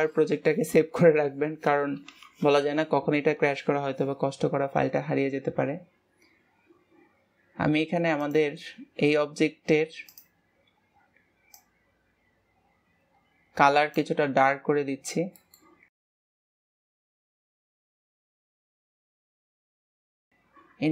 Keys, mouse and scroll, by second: 12.1 click, 15.9 middle click, 16.6 click, 17.0 middle click, 17.3 click, 18.4 middle click, 19.3 click, 20.3 click.